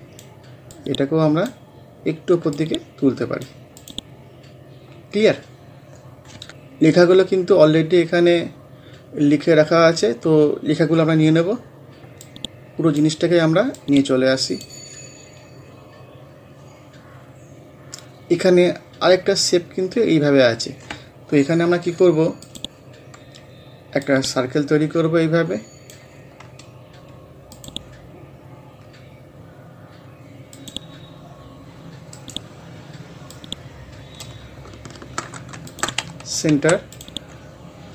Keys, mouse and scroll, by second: 6.5 scroll up 1, 7.8-8.8 scroll down 1, 8.8 scroll up 1, 11.6-12.3 scroll down 1, 12.3-15.1 drag, 15.1-15.5 scroll up 1, 22.5-27.6 drag, 30.6 click, 32.2 right click, 33.3-35.7 drag, 36.5 c, 37.0-37.9 drag.